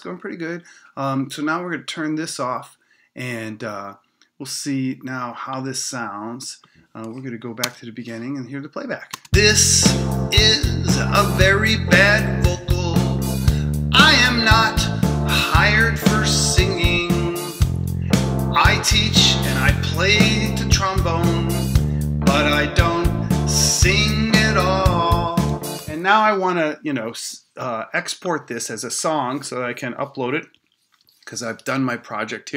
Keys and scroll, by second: 7.6 Return, 9.1 space, 25.7 space.